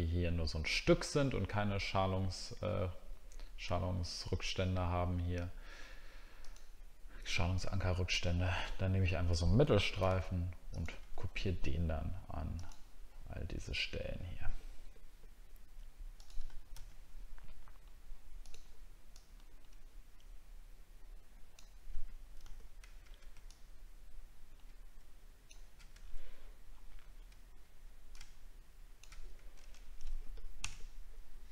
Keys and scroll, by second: 26.1 alt+scroll up 1.